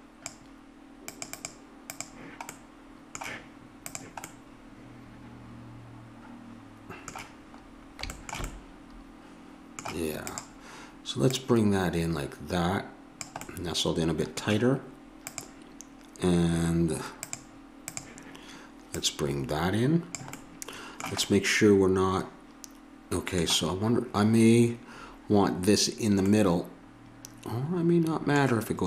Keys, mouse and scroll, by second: 1.1-3.7 drag, 2.5 middle click, 3.8-5.7 drag, 8.5-9.8 middle drag, 10.3-13.2 drag, 13.4-15.3 middle drag, 15.3-20.4 drag, 20.4 middle click.